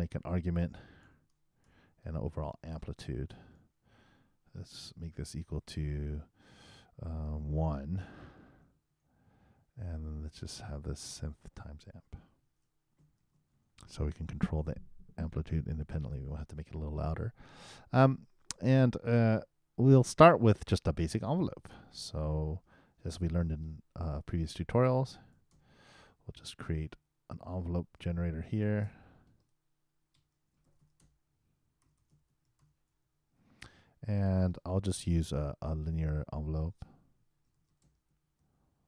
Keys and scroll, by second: 12.4 shift+8, 13.2 shift+a, 30.4-33.5 typing, 37.5 shift+e.